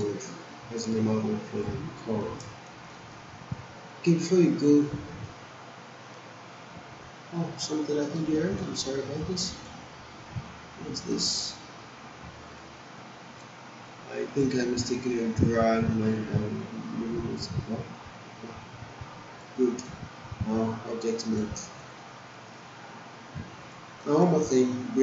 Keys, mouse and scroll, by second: 0.0-1.5 right drag, 1.5 click, 2.0 alt+middle click, 2.4 alt+right click, 2.9-4.1 alt+middle drag, 8.2-9.0 alt+right click, 8.8 alt+middle click, 9.4 ctrl+z, 11.4 ctrl+y, 12.6-13.5 right click, 13.9-14.6 drag, 19.8 right click, 21.8 click, 22.3 alt+middle click, 23.6 click, 24.0-24.6 alt+right click, 24.7 alt+middle click.